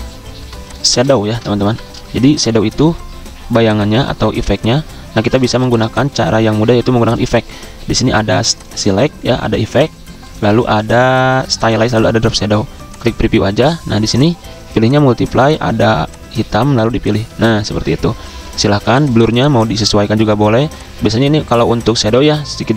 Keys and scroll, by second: 1.5 m, 5.5 v, 22.6-22.7 typing.